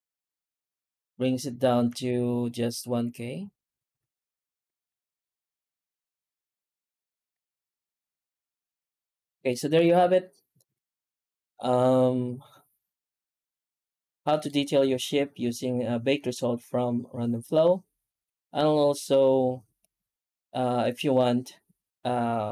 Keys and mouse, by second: 2.0 ctrl+z, 3.8 ctrl+z, 4.7 x, 6.4 ctrl+z, 6.8 ctrl+z, 7.2 Tab, 8.2 alt+h, 8.6 alt+a, 9.3 shift+middle drag, 9.8-14.3 middle drag.